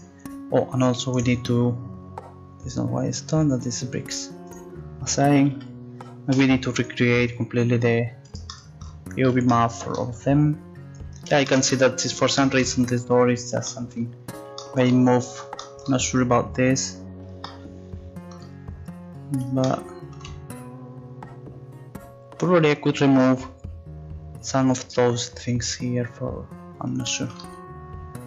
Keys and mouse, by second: 1.1-2.5 right drag, 3.5-4.8 drag, 5.4 a, 5.5 a, 6.4 u.